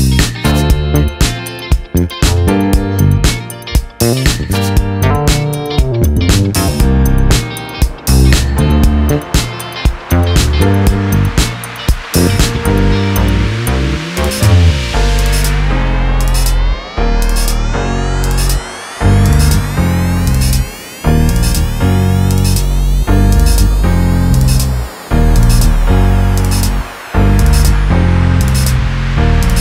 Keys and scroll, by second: 0.0 ctrl+=, 0.2 ctrl+-, 0.6 ctrl+=, 10.4 ctrl+j, 10.9 ctrl+z, 20.0 ctrl+t, 26.1 ctrl+z, 27.7 Return.